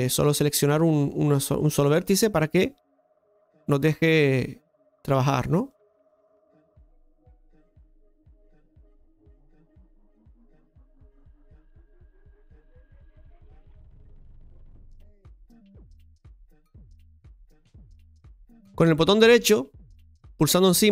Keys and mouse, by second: 0.1-1.9 drag, 5.7 right click, 6.5-7.9 drag, 8.5 right click, 8.9 click, 12.1 right click, 13.6 click, 17.0 right click, 19.1 right click, 20.2 right click.